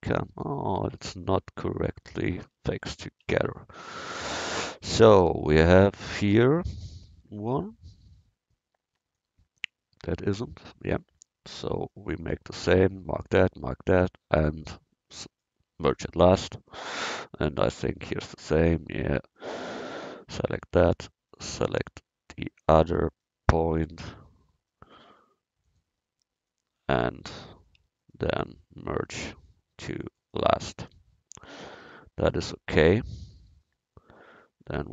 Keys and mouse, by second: 2.7 ctrl+z, 3.3 ctrl+z, 3.8 ctrl+z, 9.2-10.7 drag, 10.7 middle click, 11.8-13.0 middle drag, 13.0-18.8 drag, 17.7-18.8 right drag, 22.0-23.7 middle drag, 31.1 middle click, 32.0 middle click, 32.2 middle click, 33.2 middle click, 34.2 middle click.